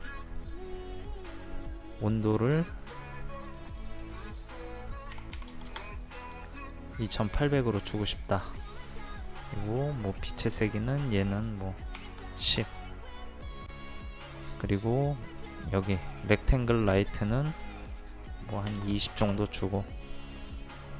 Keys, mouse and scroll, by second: 5.1 KP_2, 5.4 KP_8, 8.0-11.7 drag, 12.0 KP_1, 12.1 KP_0, 17.0 click, 18.7 KP_2, 18.8 KP_0.